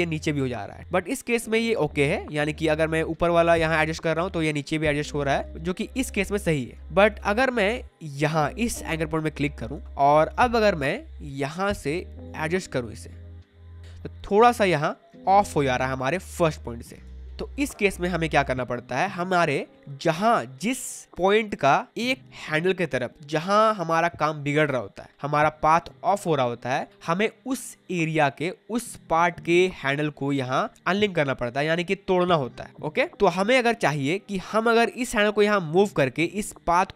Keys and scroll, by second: 5.2 space, 9.7 space, 14.7 space, 17.4 space, 18.4 space, 20.2 space.